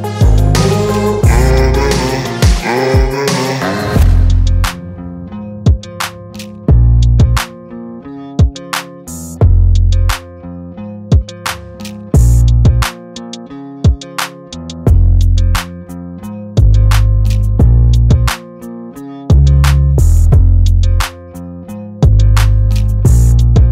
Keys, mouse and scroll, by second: 2.1-2.9 right drag, 2.9 click, 3.2-5.0 scroll down 4, 5.5-6.3 shift+middle drag, 6.3 scroll up 1, 6.5 click, 7.3 click, 7.5 shift+click, 7.7 shift+click, 8.1 shift+click, 8.3 shift+click, 8.5 shift+click, 9.1 g, 9.8 shift+click, 10.1 g, 10.7 click, 11.2 click, 11.5 shift+click, 11.8 ctrl+c, 11.9 ctrl+v, 12.0 g, 13.2 scroll up 1, 13.4 shift+middle click, 13.7 click, 14.0 shift+click, 14.2 Tab, 14.4 a, 14.5 s, 15.4 Tab, 15.7 g, 18.5 scroll up 2, 18.7 g, 20.1 g, 20.8-21.2 scroll down 2, 21.2 click, 21.5 scroll up 2, 22.1 click, 22.7 ctrl+c, 22.8 ctrl+v, 23.1 g.